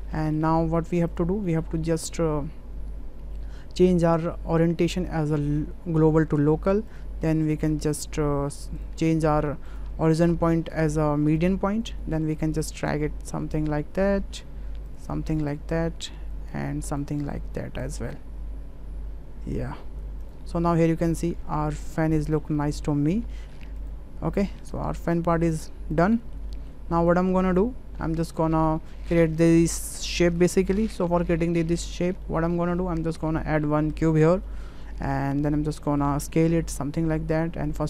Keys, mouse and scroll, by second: 0.3 shift+middle drag, 1.1 click, 1.4 shift+middle drag, 4.0-6.4 drag, 7.5 click, 8.7-9.9 drag, 10.0 click, 10.4-11.5 drag, 12.5-14.4 drag, 15.4-16.5 drag, 17.6 click, 20.2 click, 20.8-21.2 middle drag, 21.4-22.4 middle drag, 22.6 middle drag, 23.3 shift+middle click, 23.7 click, 24.9 click, 26.0 click, 26.2 shift+middle drag, 26.5 middle click, 27.1 click, 28.0 middle drag, 28.8 middle click, 29.8 shift+middle click, 31.9 middle click, 32.3 shift+middle click, 32.7 middle click, 33.0 shift+a, 35.1 click, 35.7-36.0 drag, 36.5 s.